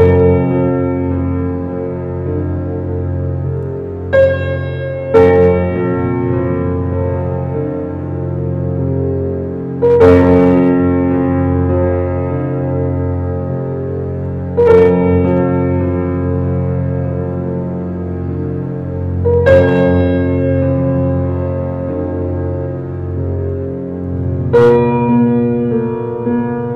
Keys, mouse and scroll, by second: 0.0 shift+click, 0.3 middle click, 0.7 scroll down 1, 1.0 shift+middle click, 1.7-3.2 drag, 6.7 ctrl+z, 8.1 e, 13.2-14.6 middle drag, 14.6-16.5 drag, 16.5 e, 19.1-21.0 middle drag, 21.2-22.2 drag, 22.2 Tab, 22.5-23.8 middle drag, 23.8 scroll up 1, 23.9 Tab, 24.5 click, 24.8 shift+click, 25.2 middle click, 26.1 shift+click, 26.5 shift+click.